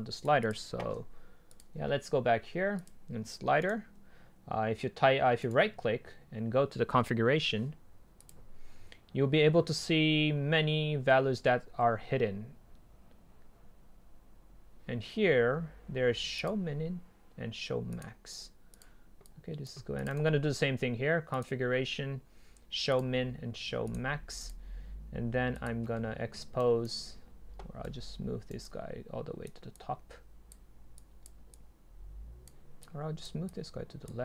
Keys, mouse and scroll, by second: 0.0 right click, 0.5-3.7 drag, 3.7-7.6 right drag, 8.4-10.4 drag, 16.7-20.1 drag, 20.1-21.4 right drag, 21.4-25.9 drag, 26.6-27.0 right drag, 27.9 right click, 28.6-29.1 drag.